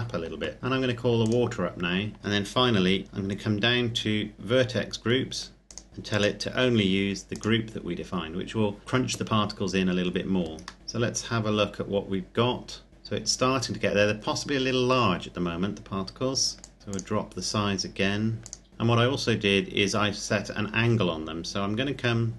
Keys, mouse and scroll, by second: 2.3-5.6 scroll down 1, 5.6 click, 10.8 middle click, 12.9-14.9 scroll up 1, 16.6 click, 20.1-21.4 scroll up 1, 21.4-21.9 scroll down 1, 21.9-22.3 scroll up 1.